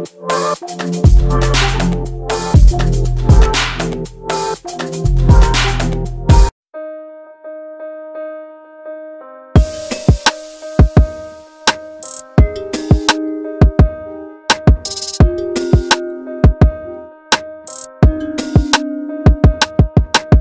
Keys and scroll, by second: 2.3 h, 9.3 Delete, 10.5 space, 11.3 q, 15.3 m, 20.0 s.